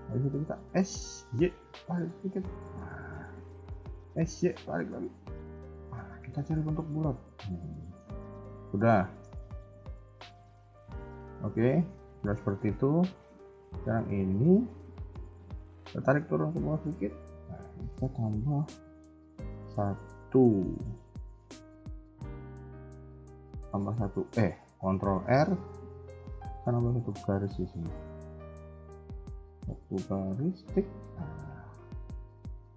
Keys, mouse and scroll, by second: 0.4 s, 2.5 middle click, 4.0 s, 6.4 scroll down 1, 6.6 middle click, 8.1 KP_1, 8.3-8.9 scroll down 4, 8.9 shift+middle click, 9.3-9.8 scroll up 4, 10.3 scroll down 1, 10.4 scroll down 1, 10.6 shift+middle click, 10.9-11.4 scroll up 1, 11.4 scroll up 1, 11.5 middle click, 12.4 KP_1, 12.8 a, 12.9 a, 13.4 b, 14.3 middle click, 15.1 KP_1, 15.4-15.9 scroll down 3, 15.7 g, 17.1 a, 17.2 a, 19.3 ctrl+r, 25.2 ctrl+r.